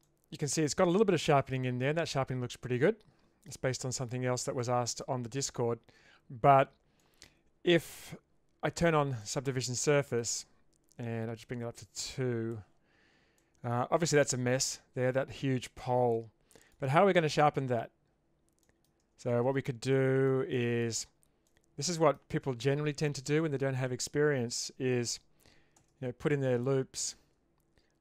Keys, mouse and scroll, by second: 0.1 middle click, 1.5 middle click, 2.7 middle click, 4.6 shift+middle click, 7.1 middle click, 7.4 Tab, 9.1 click, 9.9 middle click, 11.4-12.6 drag, 13.4 middle click, 15.8-16.7 middle drag, 18.6 middle click, 19.0 Tab, 19.9 middle click, 20.5 shift+middle click, 21.5 middle click, 25.8 ctrl+r.